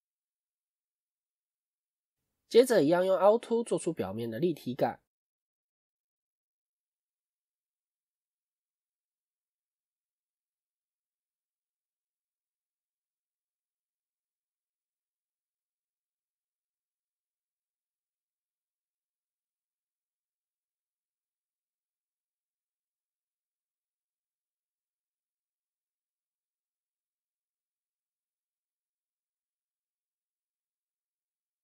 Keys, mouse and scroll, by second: 2.2-2.6 scroll down 2, 3.2 scroll down 2, 5.1-6.5 scroll up 2, 6.8-7.2 scroll down 1, 7.7 scroll down 1.